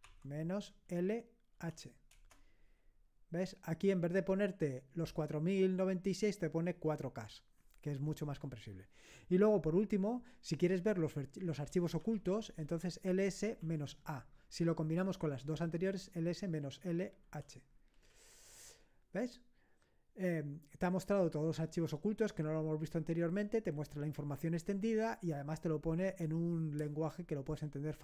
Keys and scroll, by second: 0.1-1.5 typing, 2.1 Return, 11.5-13.6 typing, 15.7 typing, 17.3 typing, 18.1 Return.